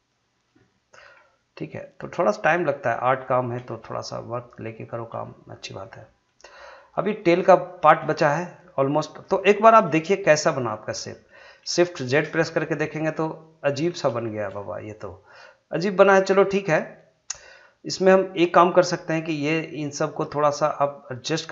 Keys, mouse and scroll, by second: 1.0 g, 2.9 click, 4.2 shift+middle click, 8.3 shift+middle click, 8.7 shift+scroll down 2, 9.0 shift+middle click, 10.0 middle click, 10.6-10.9 scroll down 1, 11.1 middle click, 12.1 shift+z, 12.6-14.0 middle drag, 14.0 scroll up 1, 14.2 shift+middle click, 14.6-19.4 middle drag, 19.4-21.5 drag.